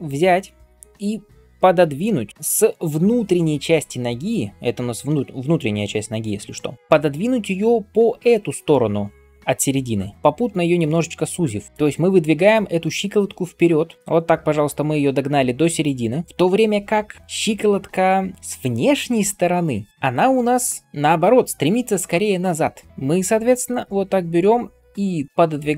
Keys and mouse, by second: 6.8 ctrl+KP_3, 13.7-18.3 drag, 18.5-25.7 drag, 18.5-25.7 middle drag, 18.5-25.7 right drag.